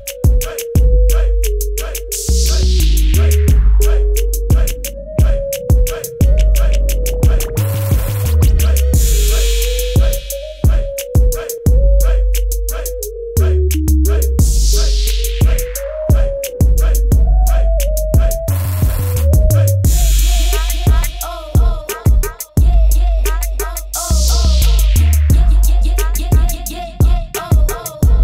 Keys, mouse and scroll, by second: 3.1 click, 7.7 click, 10.5 click, 11.1 KP_0, 11.4 Tab, 12.9 click, 20.3 click.